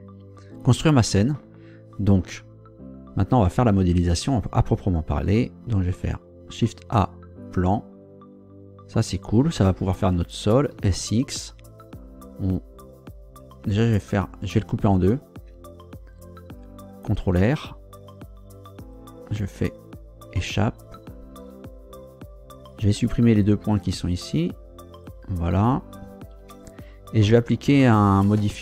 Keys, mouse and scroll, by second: 5.9 shift+a, 7.4 click, 10.7 s, 10.9 x, 13.9 Escape, 15.4 Tab, 17.2 ctrl+r, 18.8 click, 20.3 Escape, 22.7 shift+right click, 23.6 shift+right click, 24.2 shift+Delete, 24.9 click, 26.4 Tab.